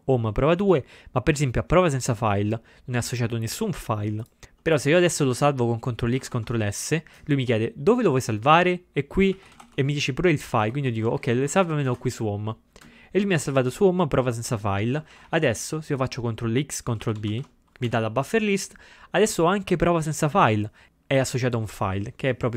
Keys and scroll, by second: 6.2 ctrl+x, 6.3 ctrl+s, 9.2-12.1 typing, 15.2 ctrl+x, 15.4 0, 17.1 ctrl+x, 17.4 ctrl+b.